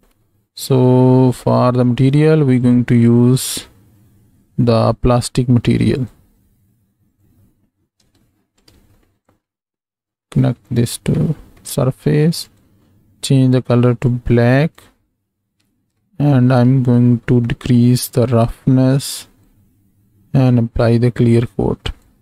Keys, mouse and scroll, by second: 1.6 middle click, 2.6-6.1 drag, 7.1 click, 8.1 x, 8.5 click, 10.2-10.8 drag, 11.3 middle click, 12.4 click, 16.7 click, 16.7 middle click, 18.0-19.5 drag, 20.8-22.0 drag.